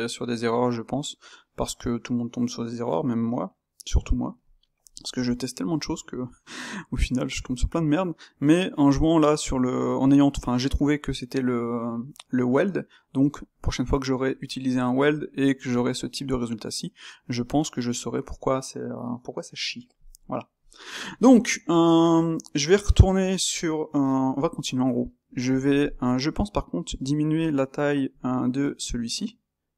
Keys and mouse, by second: 15.7 click, 16.5-26.6 middle drag, 26.6 click, 27.5 space.